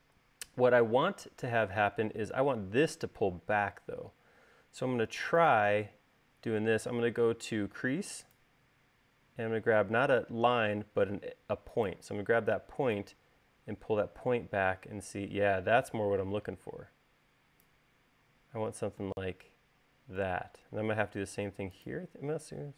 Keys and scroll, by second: 1.5 space.